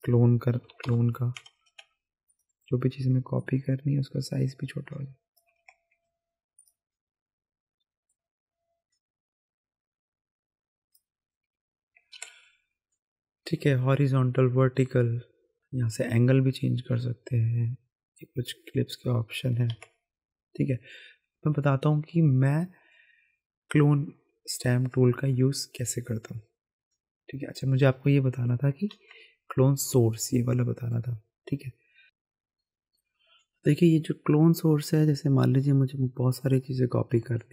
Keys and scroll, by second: 0.5 KP_5, 0.6 KP_0, 0.8 Return, 5.6 ctrl+z, 12.1 ctrl+z, 19.7 ctrl+Tab, 28.9 ctrl+Tab, 32.0 [.